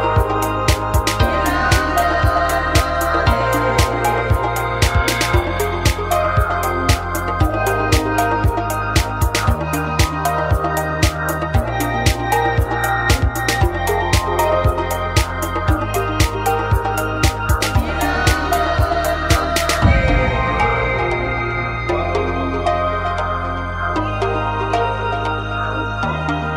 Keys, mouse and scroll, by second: 0.0-1.5 right drag, 0.8 f, 1.0 a, 1.7 g, 4.0 a, 5.9-7.8 right drag, 6.5 f, 6.8 a, 7.1 g, 8.8-10.0 drag, 10.0 a, 12.4 right click, 13.1 f, 13.1 a, 13.7 g, 15.4 click, 15.9 right click, 16.1 middle click, 16.4 g, 17.9 click, 18.1 middle click, 18.9-19.3 scroll down 1, 18.9 a, 19.3-20.8 middle drag, 20.8 right click, 21.4 f, 21.7 s, 24.4 g, 26.3 a, 26.4 middle click.